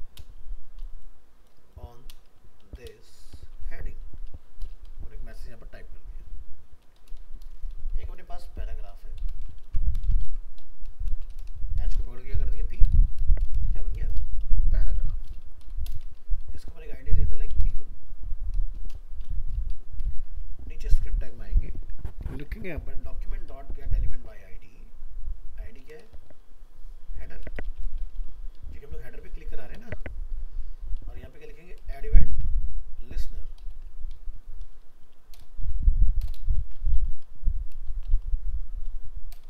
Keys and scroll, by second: 9.6 ctrl+c, 10.2 ctrl+v.